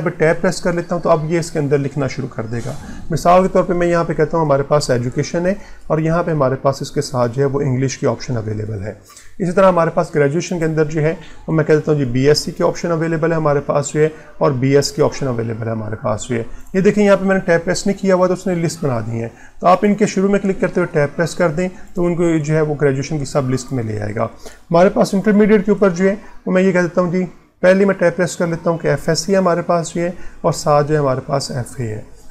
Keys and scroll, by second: 20.7 Tab, 22.4 Tab, 27.7 Tab.